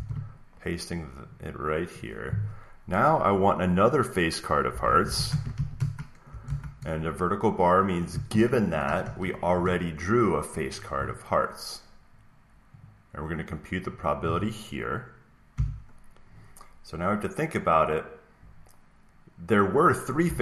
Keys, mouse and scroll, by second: 1.2 click, 1.4 click, 1.9 click, 4.4-6.2 typing, 8.2 Right, 8.4 Right, 8.6 Right, 8.8 Right, 8.9 Right, 9.1 Right, 12.8 click, 13.8 click, 15.8 click, 20.1 3.